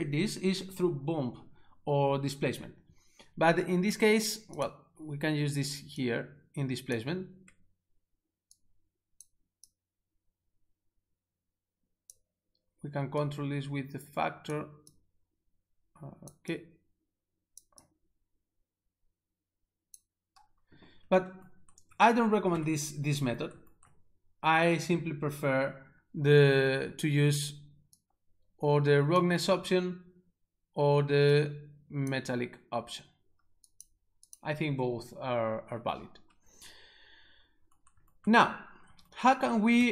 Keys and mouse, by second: 4.1 click, 4.6 double click, 5.9 double click, 6.1 double click, 8.5 click, 8.6 click, 9.7 click, 13.3 click, 15.0 click, 16.6 click, 17.9 click, 21.4 ctrl+alt+shift+4, 28.0 click, 31.4 click, 33.6 click, 33.7 click, 33.8 click.